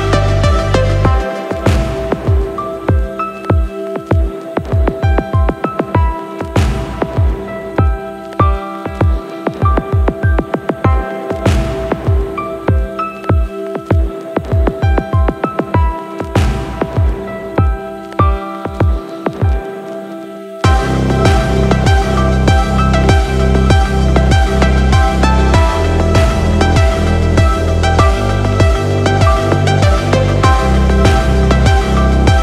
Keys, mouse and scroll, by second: 10.6 space, 12.3 click, 14.5-15.2 scroll down 3, 15.2-17.0 scroll down 8, 18.2 middle click, 21.7-32.4 drag.